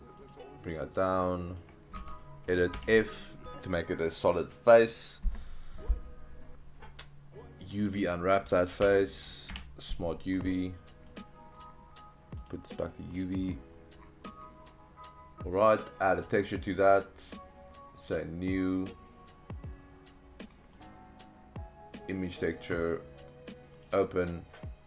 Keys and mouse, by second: 0.2 click, 1.1 click, 1.9 Tab, 2.8 f, 8.0 Tab, 8.9 Tab, 9.5 u, 12.4-13.3 drag, 18.2 click, 20.8-22.5 drag, 23.8 click.